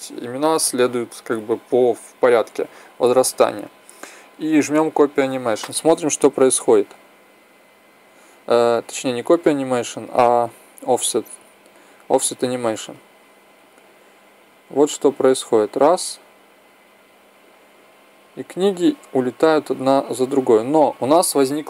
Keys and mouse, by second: 6.5-8.4 drag, 10.8-15.4 drag.